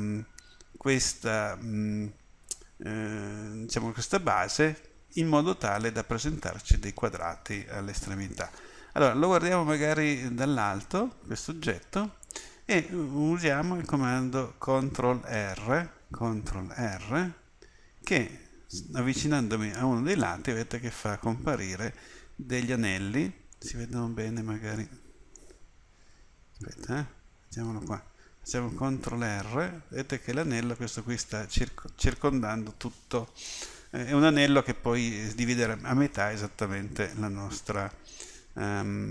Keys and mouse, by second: 7.6-10.5 middle drag, 10.5 KP_7, 17.1 ctrl+r, 26.9-27.9 middle drag, 29.2 ctrl+r.